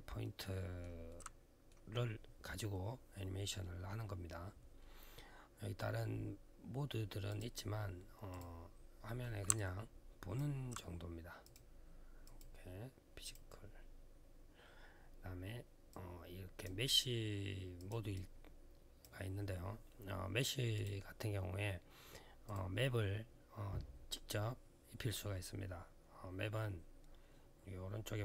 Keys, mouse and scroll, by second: 0.0 alt+middle click, 0.9 alt+middle click, 7.1 click, 8.1 click, 9.3 alt+click, 11.2 click, 12.0 click, 13.0 click, 15.7 click, 17.6 click, 17.7 click, 17.9 click, 20.5 click, 22.2 click.